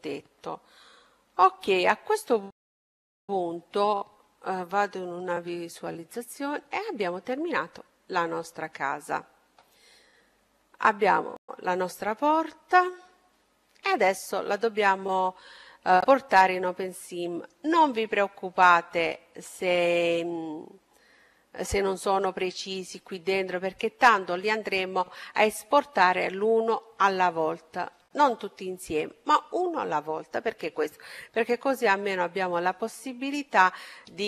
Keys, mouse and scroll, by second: 2.5-4.2 middle drag, 4.6 z, 5.4-8.8 middle drag, 10.7-12.4 middle drag, 16.3-17.7 middle drag, 19.2-21.0 right drag.